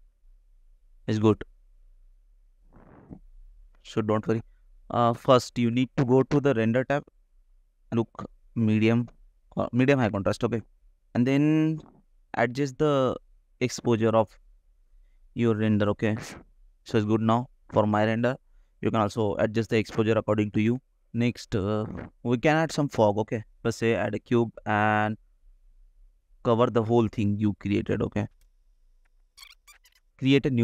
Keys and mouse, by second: 0.5 middle click, 1.8 ctrl+s, 5.9-7.4 shift+drag, 8.0-10.3 drag, 12.0-13.3 drag, 14.5 shift+click, 14.9-16.6 shift+middle drag, 22.9 middle click, 23.5 middle click, 23.7 click, 24.3 shift+a, 25.6 s, 26.1 click, 27.2 middle click, 28.0 middle click, 28.3-29.5 typing, 30.1-30.6 drag.